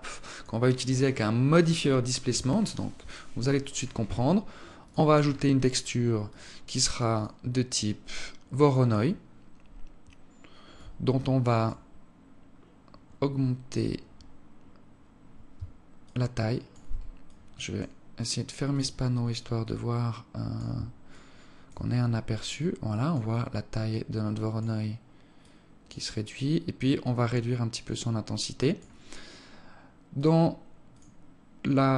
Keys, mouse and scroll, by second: 2.7-3.2 scroll up 1, 3.2 click, 4.5 click, 10.4 click, 11.9-12.5 scroll down 4, 13.1-13.7 scroll up 2, 13.7 scroll up 2, 15.7 shift+click, 16.9 click, 18.3 click, 20.7 click, 22.2 click, 23.5 click, 25.1 click, 28.2 click, 29.8 click.